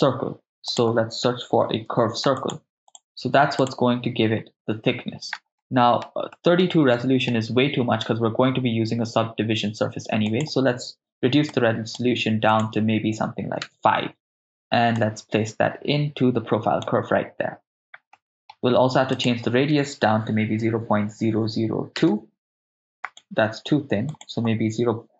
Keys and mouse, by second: 0.8 click, 2.0 shift+a, 5.6 ctrl+middle click, 6.4 middle click, 7.0 ctrl+middle click, 10.3-11.9 drag, 12.5-13.8 drag, 14.4 ctrl+middle click, 15.0-16.8 drag, 18.2 middle click, 19.2-22.1 drag, 21.1 0, 23.0-25.1 drag.